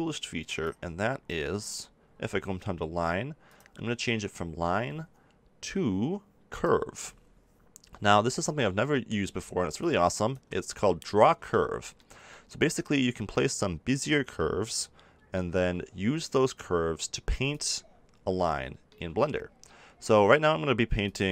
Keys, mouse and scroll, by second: 0.5 click, 1.5-3.4 middle drag, 3.4-5.2 drag, 9.8 click, 10.6 click, 16.8-18.1 drag, 18.1-21.0 middle drag, 21.0 click.